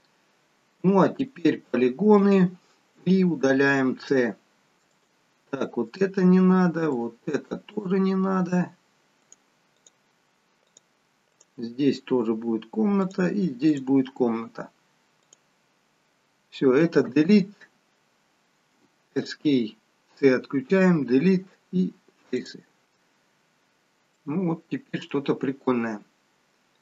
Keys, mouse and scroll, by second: 2.1 click, 4.0 c, 20.7 Delete, 24.2 middle click.